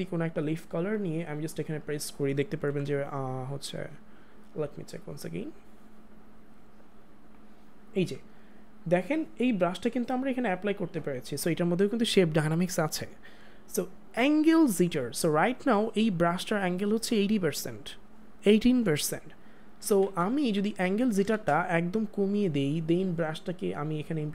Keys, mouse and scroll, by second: 2.6 click, 2.6 ctrl+z, 3.3 click, 19.8 click, 19.9 ctrl+z, 21.3 ctrl+shift+z, 22.0 click.